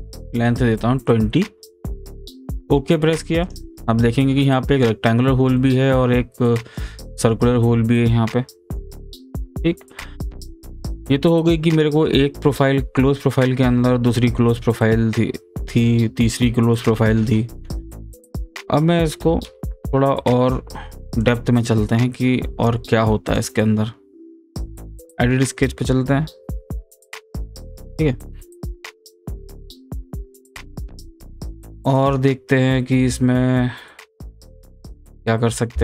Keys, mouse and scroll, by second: 0.7-2.6 middle drag, 2.6 click, 3.9-11.0 middle drag, 18.3 click, 19.4 Return, 21.2 click, 23.3 right click, 24.9 click, 28.4 scroll down 1, 28.9 scroll up 1, 30.1-31.3 scroll down 1, 31.3-34.2 drag, 34.2 click.